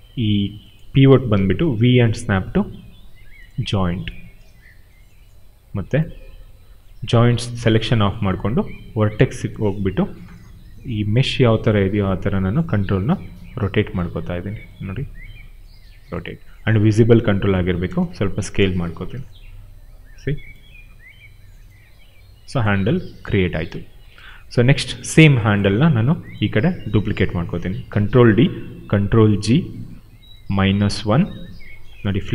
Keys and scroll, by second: 1.7 v, 13.9 e, 16.1 r, 17.5 space, 18.8 f, 28.0 ctrl+d, 29.0 ctrl+g, 30.4-31.4 typing.